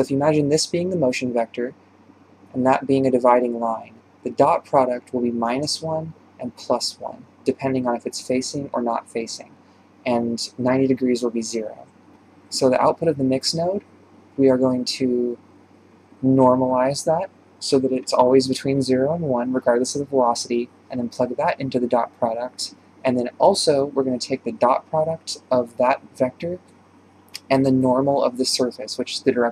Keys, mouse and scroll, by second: 0.6-1.0 scroll down 2, 1.0 d, 1.8-5.7 drag, 5.7 d, 5.9-9.3 drag, 9.3 d, 10.8-12.1 right drag, 12.1-13.1 drag, 15.0 click, 20.4 click, 22.6-24.6 drag, 24.6 shift+a, 25.9-26.4 drag, 26.9 ctrl+shift+click, 28.5 shift+space, 28.9-29.5 scroll down 3.